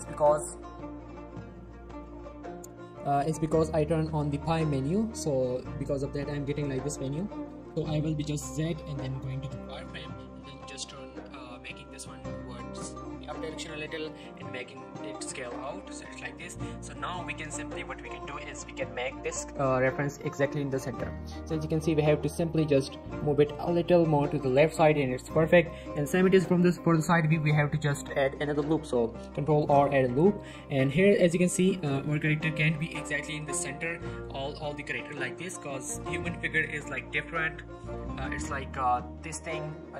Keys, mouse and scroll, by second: 0.2-1.0 z, 1.1 z, 3.4 typing, 7.9-8.8 z, 9.4-9.8 scroll down 1, 9.8-10.2 scroll up 1, 10.2 scroll down 1, 10.4 g, 10.6 z, 12.7 s, 14.3 click, 14.9 scroll up 1, 15.3 shift+middle click, 15.8 shift+middle click, 16.0 scroll up 1, 16.3 shift+middle click, 16.9 click, 17.2-18.7 scroll up 4, 17.5 shift+middle click, 18.2 shift+middle click, 18.7-20.0 typing, 19.3 right click, 19.5-19.8 scroll down 1, 20.2 right click, 20.4 scroll up 1, 20.9 shift+middle click, 21.1-21.5 shift+scroll up 2, 21.5 g, 21.7 x, 23.2 click, 23.4 scroll down 1, 24.2 scroll down 1, 25.2 middle click, 25.4-26.3 scroll up 1, 27.4 click, 28.2 shift+middle click, 28.4 Tab, 29.2 ctrl+r, 29.6 click, 29.8 right click, 30.0 Tab, 30.2 shift+middle click, 30.4-30.7 scroll up 1, 30.8 click, 31.1 shift+middle click, 31.3-32.0 scroll up 3, 31.5 shift+middle click, 32.0 shift+middle click, 32.1 shift+middle click, 32.5 g, 32.7 y, 33.5 click, 33.7-34.1 scroll down 2, 34.1 shift+middle click, 34.9-35.4 scroll up 1, 35.5 shift+middle click.